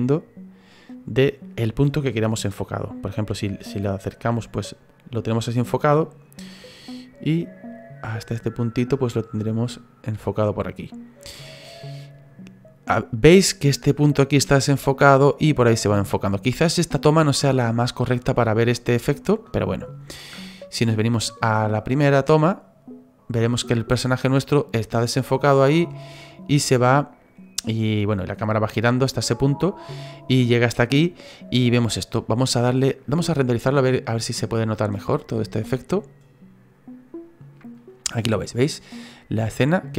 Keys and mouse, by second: 21.8 click, 25.3 click, 25.8 click, 26.2 click, 26.7 click, 27.3 click, 28.0 click, 28.5 click, 29.0 click, 29.6 click, 30.7 click, 32.3 click, 33.7 click, 34.1 click.